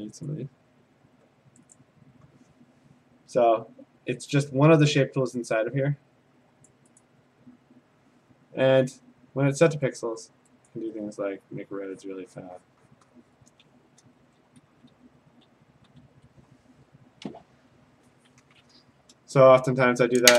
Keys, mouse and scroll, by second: 0.3 click, 1.8 right click, 1.8 click, 6.7 click, 7.0 click, 10.6 click, 12.0 click, 12.1 click, 12.6 click, 12.9 click, 13.2 click, 14.1 ctrl+z, 14.5 ctrl+z, 14.7 ctrl+z, 14.9 ctrl+z, 15.1 ctrl+z, 15.9 ctrl+z.